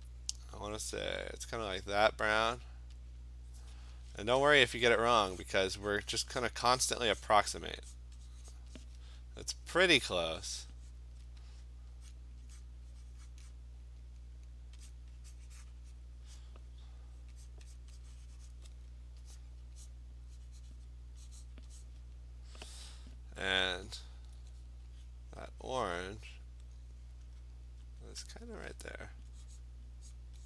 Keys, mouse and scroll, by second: 0.7 click, 2.6 click, 3.2 click, 4.5 click, 5.5 click, 5.9 click, 6.2 click, 6.5 click, 6.9 click, 7.3 click, 8.0 click, 8.6 click, 8.9 click, 10.1 click, 10.7 click, 11.0 click, 12.1 click, 12.7 click, 13.3 click, 13.6 click, 14.9 click, 15.4 click, 15.7 click, 16.0 click, 16.4 click, 16.7 click, 17.2 click, 17.5 click, 17.8 click, 18.0 click, 18.5 click, 19.4 click, 19.9 click, 20.9 click, 21.6 click, 21.9 click, 23.6 click, 24.0 click, 27.3 click, 28.0 click, 28.4 click, 29.6 click, 30.2 click.